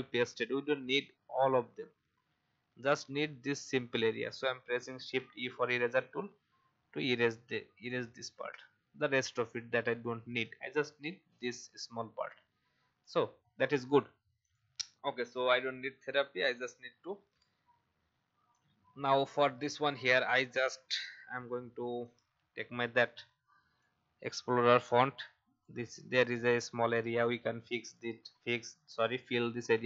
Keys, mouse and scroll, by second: 4.9 shift+e, 6.0-7.3 alt+drag, 7.8 alt+click, 9.4 alt+v, 9.9 click, 10.5 alt+scroll up 1, 11.3 click, 13.5 alt+scroll down 1, 14.4 click, 14.9 alt+scroll down 1, 15.4 click, 16.8-18.5 alt+scroll down 1, 18.5 click, 21.1 i, 22.0 click, 22.3 v, 23.0 alt+scroll up 1, 23.8 shift+click, 24.6 click, 26.2-26.6 alt+scroll up 1, 27.8 right click, 28.9 click.